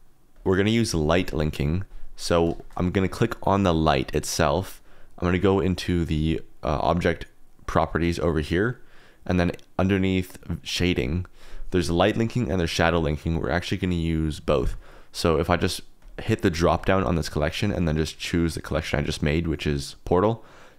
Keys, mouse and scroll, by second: 0.3 click, 2.5 shift+click, 2.6 middle click, 6.1 click, 10.4 click, 12.2 click, 12.5 click, 15.5 click, 16.5 click, 16.9-20.7 drag.